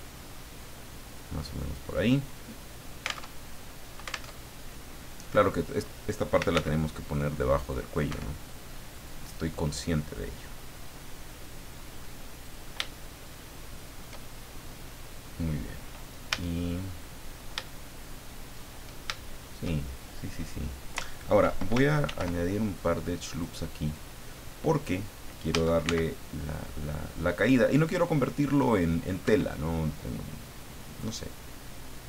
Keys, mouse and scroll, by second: 0.4-2.7 drag, 3.2 alt+Tab, 4.2 alt+Tab, 6.1-7.0 typing, 7.1 click, 8.1 Escape, 8.9-12.6 drag, 12.9-14.2 shift+middle drag, 16.3 a, 16.9 middle click, 18.9 shift+middle click, 19.3-20.5 shift+middle drag, 22.0 ctrl+r, 22.6-23.0 ctrl+scroll up 3, 23.3 click, 23.8 click, 25.5 a, 25.8 c, 26.5-29.2 drag, 29.2 Escape, 31.3-32.0 drag.